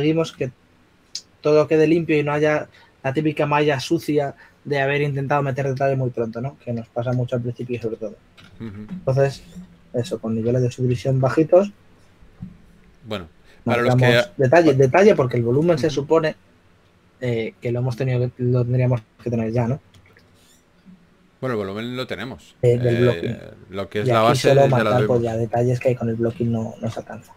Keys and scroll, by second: 10.2 4, 13.0 typing, 21.0-21.7 typing, 26.7 s, 27.1 shift+d.